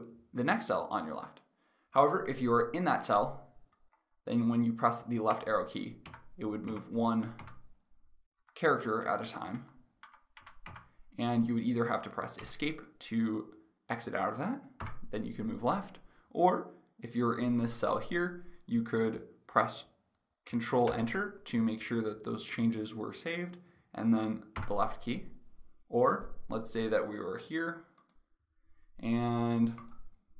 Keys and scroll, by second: 5.0 Left, 7.9 Right, 9.7 Left, 12.1 Escape, 14.4 Left, 20.5 ctrl+Return, 24.3 Left.